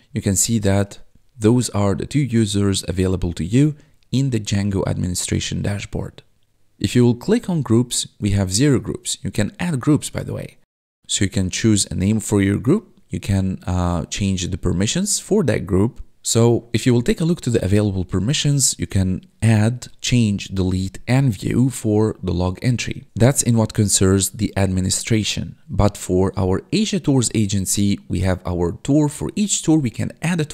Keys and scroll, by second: 1.2 1, 3.6 1, 16.1 1, 16.6 1.